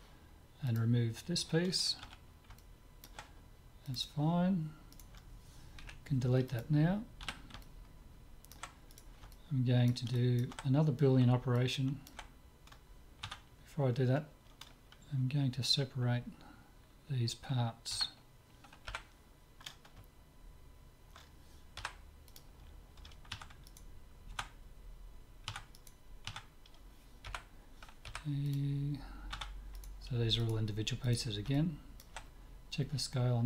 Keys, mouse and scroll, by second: 2.2 z, 2.6-4.3 middle drag, 3.9-5.7 drag, 5.0-6.7 right drag, 5.9 Delete, 7.2 z, 7.6-8.9 middle drag, 8.9-10.9 drag, 8.9 right click, 9.4-13.4 middle drag, 13.4 Tab, 18.0 a, 19.0 l, 21.8 p, 23.5 Tab, 23.7-25.6 right drag, 24.3 Tab, 25.6 Tab, 25.9-27.5 right drag, 26.4 Tab, 27.3 l, 27.5 click, 28.1 p, 29.3 Tab, 29.8-33.0 drag, 31.6-32.8 right drag, 33.0 middle click.